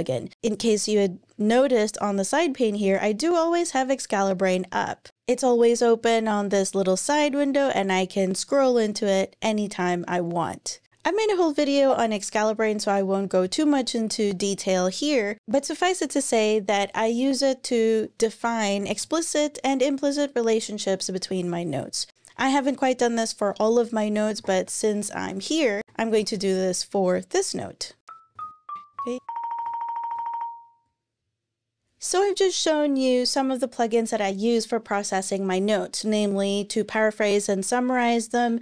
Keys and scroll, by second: 18.7 Return, 24.0-26.3 typing, 28.0-30.7 typing, 28.9 Return, 30.8 Return.